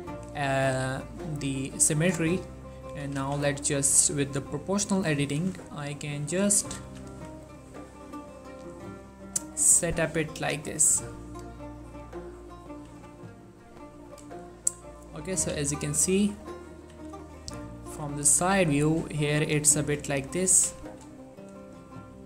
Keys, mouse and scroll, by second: 3.0 g, 3.3 y, 4.9 click, 5.4 shift+middle click, 5.7 scroll up 1, 6.6 click, 7.0 g, 7.2 y, 7.9 scroll up 1, 9.0 click, 9.6 shift+middle click, 10.5 click, 10.8 g, 11.7-12.0 scroll down 1, 12.0 click, 13.0 g, 14.2 click, 14.5 shift+middle click, 14.6-15.3 scroll up 3, 15.3 click, 15.8 middle click, 16.4 scroll up 2, 16.6 middle click, 17.0 3, 17.5 shift+middle click, 18.0 g, 18.1-19.4 scroll up 2, 19.4 click, 19.9 g, 20.2 click, 20.6 scroll down 2, 20.9 shift+middle click, 21.8 shift+middle click.